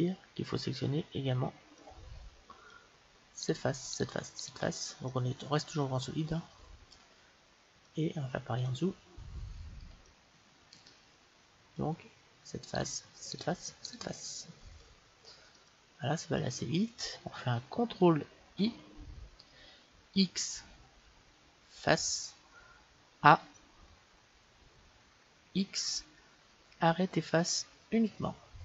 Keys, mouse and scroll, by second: 1.8-6.2 middle drag, 3.4-6.2 right drag, 7.2-12.8 middle drag, 12.8-15.8 right drag, 14.5-18.2 middle drag, 18.6 ctrl+i, 20.2 x, 23.3 a, 25.6 x.